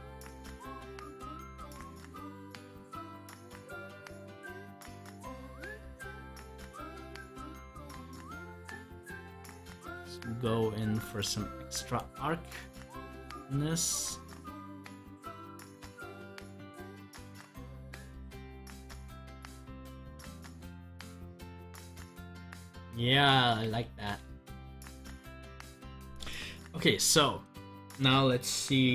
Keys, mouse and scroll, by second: 4.2 scroll up 1, 5.2-17.3 drag, 22.8 scroll down 1.